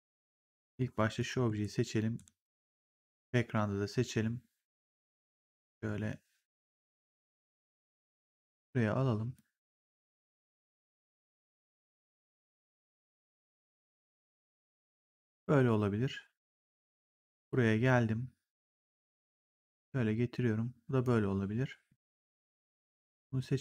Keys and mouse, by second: 1.1 click, 1.5 ctrl+1, 7.5 w, 8.3 click, 11.5 click, 17.0 click, 18.5 click, 22.3 click, 23.5 click.